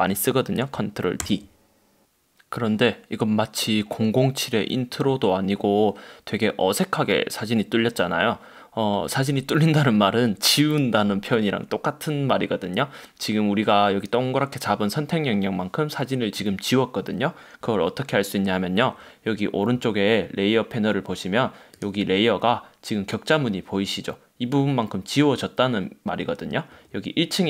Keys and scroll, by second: 0.0 super+z, 1.3 super+d.